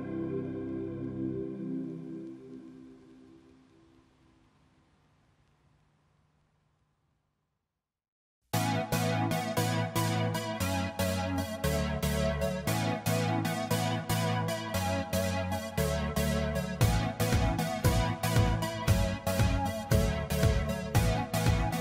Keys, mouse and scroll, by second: 0.5 ctrl+=, 1.4 ctrl+-, 15.0 Caps_Lock, 15.1 p, 15.8 a, 16.9-18.5 typing, 20.2 ctrl+a.